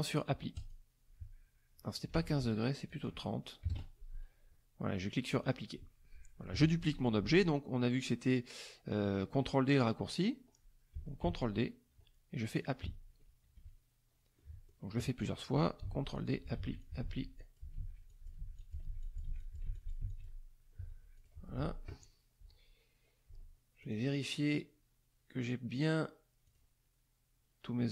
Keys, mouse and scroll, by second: 0.5 click, 2.1 ctrl+z, 2.9 click, 3.6 KP_3, 3.7 KP_0, 5.4 click, 11.2 ctrl+d, 12.6 click, 13.5 KP_Subtract, 14.4 click, 15.8 ctrl+d, 16.1 ctrl+click, 16.5 ctrl+d, 16.8 ctrl+click, 17.3 ctrl+click, 17.7 ctrl+d, 18.1 ctrl+click, 18.5 ctrl+click, 19.0 ctrl+click, 21.1 click, 23.8 click, 26.4 click.